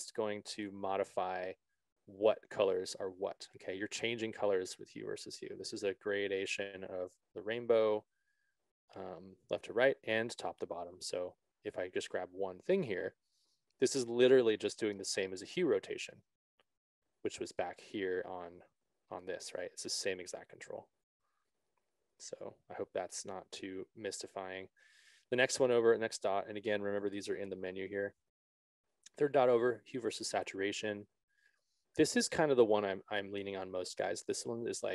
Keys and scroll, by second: 20.6 ctrl+z.